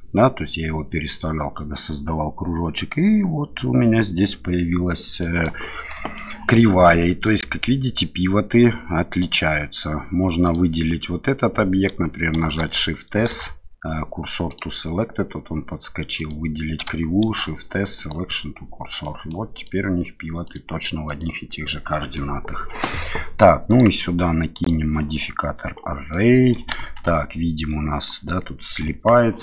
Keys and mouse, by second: 5.2 middle click, 5.9 KP_7, 7.2 click, 9.1 click, 10.4 click, 12.4 shift+s, 13.3 shift+s, 16.2 click, 17.2 shift+s, 19.0-19.3 middle drag, 19.5 click, 20.4 click, 21.1 click, 21.9 middle drag, 23.8-24.7 drag, 26.1-26.5 middle drag, 26.8 KP_1, 27.7-28.0 middle drag, 28.8 KP_1.